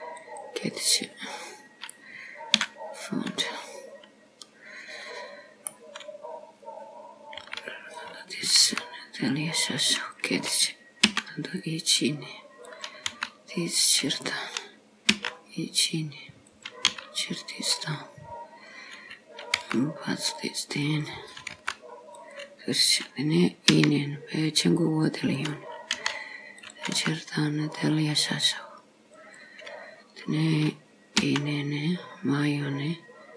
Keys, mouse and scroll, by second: 2.6 KP_2, 3.6 middle click, 7.4 s, 8.7 g, 11.1 e, 13.1 s, 15.2 e, 17.0 s, 18.5-18.8 scroll down 2, 19.7 g, 21.6 g, 23.8 e, 26.0 s, 27.1 g, 29.6-29.9 scroll down 3, 31.3 e.